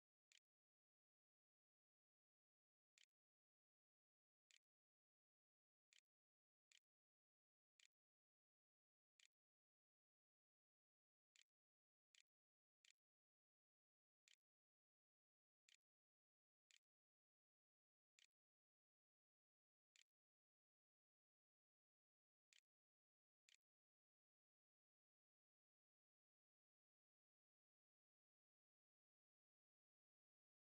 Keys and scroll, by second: 0.0-4.3 typing, 5.7-22.4 typing, 22.7 ctrl+z, 22.8 ctrl+x, 23.3 ctrl+s, 23.7 a.